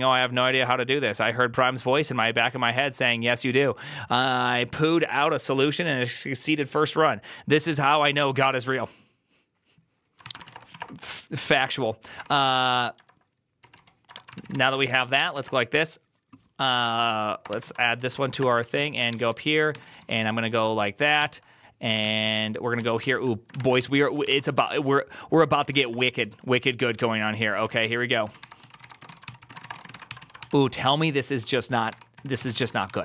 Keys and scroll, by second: 10.0-15.8 typing, 17.1-20.9 typing, 21.1 ctrl+h, 21.9 ctrl+t, 22.1 ctrl+n, 22.7-33.0 typing, 22.9 ctrl+c, 23.0 ctrl+c.